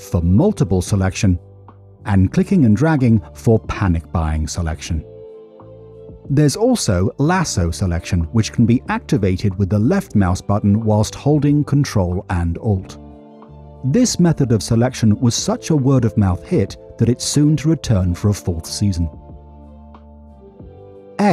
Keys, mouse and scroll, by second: 0.4 shift+click, 1.1 shift+click, 2.5 drag, 6.4 middle click, 7.1 middle click, 7.8 middle click, 12.9 ctrl+alt+drag, 18.7 middle click, 19.3 middle click.